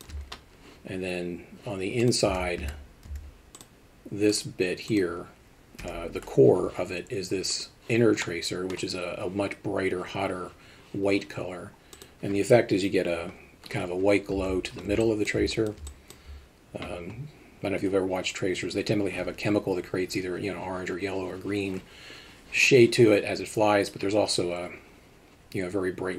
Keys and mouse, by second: 2.0 click, 2.3 Tab, 2.6 a, 3.1 z, 4.3 click, 4.9 click, 5.8 l, 7.5 click, 8.3 middle click, 14.4 Tab, 15.0 middle click, 15.7 alt+shift+middle click.